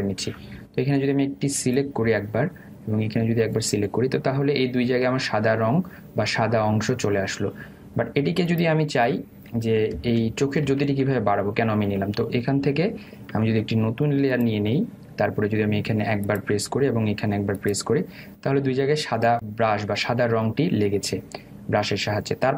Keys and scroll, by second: 10.7 ctrl+alt+z.